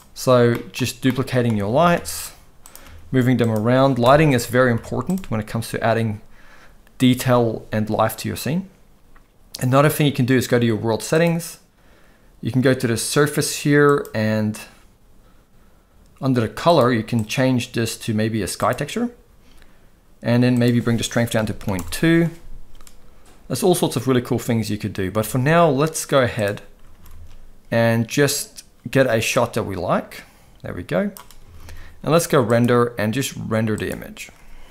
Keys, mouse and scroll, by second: 0.5 middle drag, 1.1-1.4 middle drag, 1.6 shift+d, 2.8 g, 4.0 KP_0, 4.7 z, 13.9-15.0 drag, 16.7 click, 17.2-18.7 drag, 20.5-21.7 drag, 25.1 z, 26.9 ctrl+s, 27.1 ctrl+s, 29.3-31.1 drag, 31.5 ctrl+s, 31.6 ctrl+s, 32.5-34.7 drag.